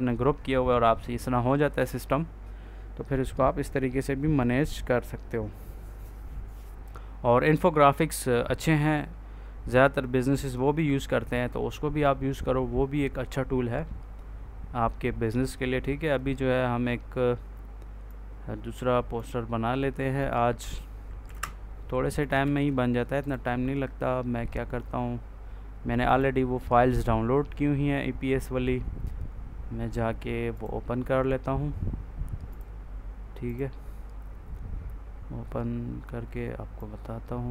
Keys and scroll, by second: 21.1 Delete, 22.3 ctrl+z.